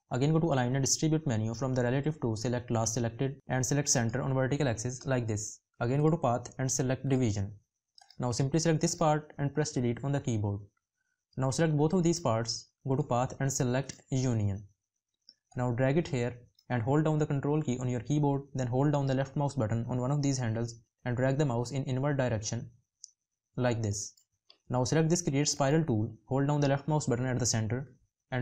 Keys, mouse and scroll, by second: 17.1 ctrl+click.